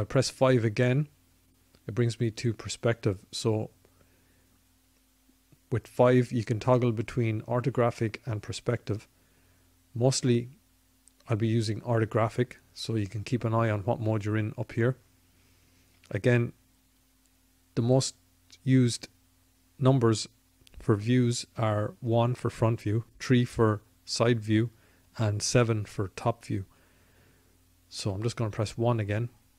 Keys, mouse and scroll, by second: 5.3 KP_5, 6.4 KP_5, 8.9 KP_5, 20.5 KP_1, 22.1 KP_3, 24.2 KP_7, 26.9 KP_1, 28.9-29.5 drag.